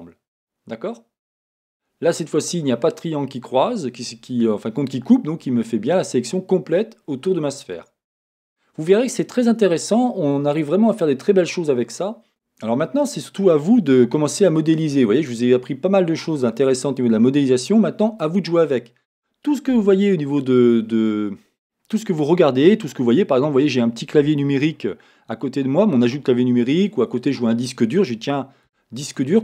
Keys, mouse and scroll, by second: 8.1-12.0 scroll down 1, 12.3 Tab, 14.0 shift+middle click, 15.2 middle click, 16.9-17.4 scroll down 1, 18.2 middle click, 19.3-22.7 scroll up 1, 28.7 x.